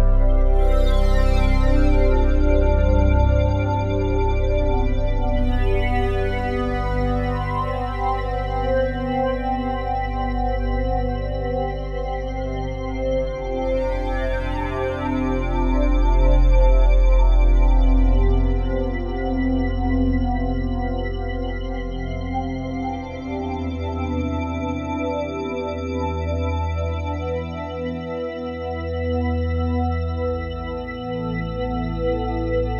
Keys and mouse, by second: 0.5-7.4 drag, 2.7 typing, 4.3 typing, 7.4 typing, 8.5 Escape, 9.4-10.1 typing, 11.1 click, 11.7 g, 12.1 z, 13.4 click, 14.5 e, 14.8 3, 16.4-18.0 ctrl+alt+drag, 16.9-18.0 typing, 18.8 click, 20.8 typing, 22.1-26.9 alt+shift+drag, 26.9-27.7 typing, 28.6 click, 29.3-29.7 typing, 31.1 click, 32.1 typing.